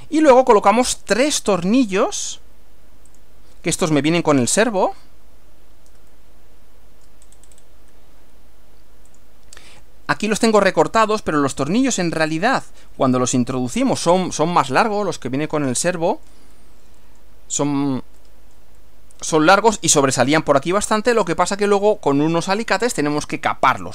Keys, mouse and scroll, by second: 0.2 scroll down 2, 3.1 click, 4.7 click, 6.1-7.2 shift+middle drag, 7.2-7.8 shift+scroll up 3, 9.2 click, 12.8 click, 13.8 click, 14.2 scroll down 2, 14.8 middle click, 15.9 shift+middle click, 16.8 middle click, 18.2 shift+middle click, 19.1 middle click.